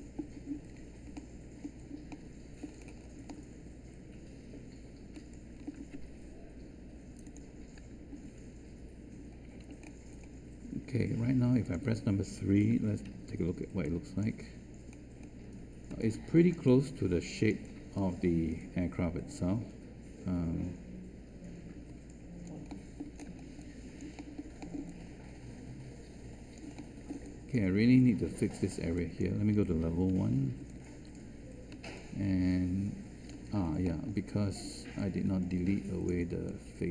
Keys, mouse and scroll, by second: 13.0 3, 15.9 space, 30.1 1.